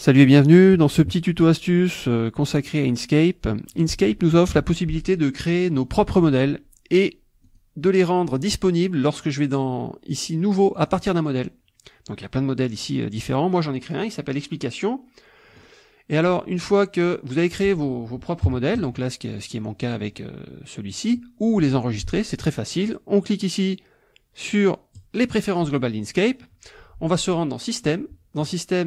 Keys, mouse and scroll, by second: 7.5 click, 10.8 click, 13.8 click, 15.6 click, 18.4 KP_5, 18.8 KP_Subtract, 19.6 click, 19.7 middle click, 20.6 middle click, 25.0 click, 27.7 click.